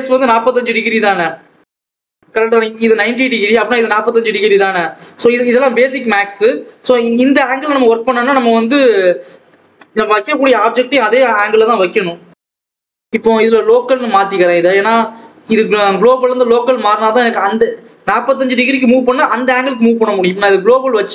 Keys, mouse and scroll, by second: 1.5-1.9 scroll down 3, 1.9 click, 2.3-4.0 scroll up 2, 10.6 KP_7, 11.3 scroll up 1, 11.5 Tab, 11.8-12.1 scroll up 2, 12.1 g, 14.6-21.1 drag.